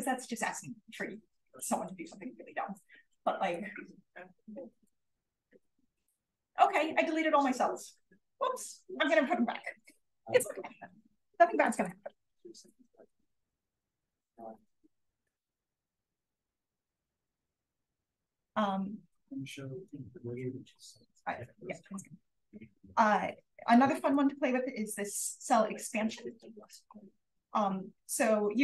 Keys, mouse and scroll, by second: 0.8-3.1 scroll up 1, 1.5 drag, 3.1-3.5 drag, 3.1-5.1 scroll up 1, 5.1-5.9 scroll up 1, 5.3 drag, 5.9-6.8 scroll down 1, 6.3 drag, 6.8-10.2 scroll up 1, 10.2-11.6 scroll up 1, 11.6 click, 12.2-14.3 scroll down 1, 14.3-15.2 scroll down 1, 14.3 0, 15.2-16.1 scroll down 1, 16.1-17.3 scroll down 1, 16.2 click, 17.3 scroll down 1, 18.8-21.2 scroll up 2, 19.4 click, 21.2-22.1 scroll up 1, 22.1-23.6 scroll up 1, 23.6 click, 24.4 click, 26.0 click, 26.6 click, 27.1-27.8 scroll down 1, 27.8-28.4 scroll down 1, 28.4-28.6 scroll down 1.